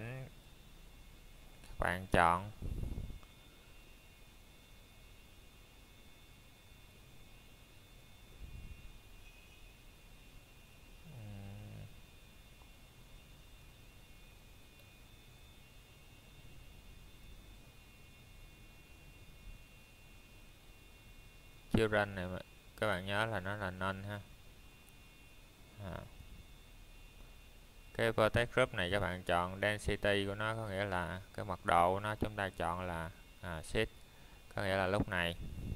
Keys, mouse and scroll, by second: 2.4 click, 10.2 click, 11.2 middle click, 16.9 click, 28.0 click.